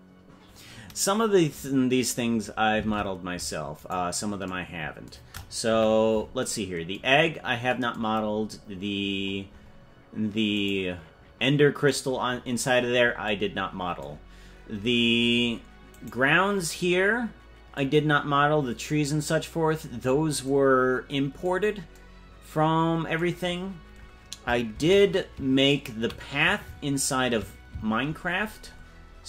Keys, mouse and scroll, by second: 2.9 ctrl+Tab, 3.9 right click, 5.7 KP_Decimal, 7.1-7.4 scroll down 5, 8.2 scroll up 5, 9.2-10.6 scroll up 12, 10.6 right click, 12.0-12.8 scroll down 14, 14.3-16.0 scroll down 11, 16.1 right click, 23.4-24.3 scroll up 10, 24.7 shift+`.